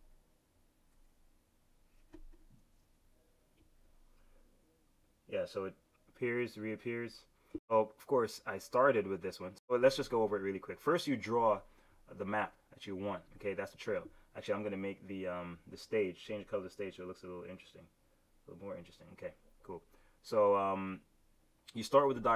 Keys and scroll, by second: 2.6 super+z.